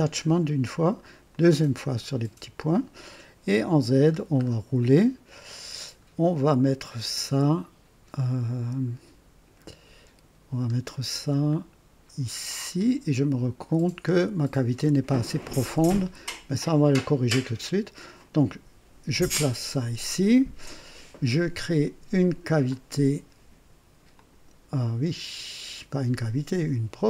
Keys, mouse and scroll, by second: 1.2 click, 3.4 click, 3.9-4.3 scroll down 2, 4.4-4.7 scroll up 2, 7.6 scroll up 2, 8.4 scroll up 2, 9.8 scroll up 2, 11.6 scroll down 2, 12.2 scroll up 2, 13.2 scroll down 2, 13.7 scroll up 2, 19.3 click, 22.6 click, 24.1 click.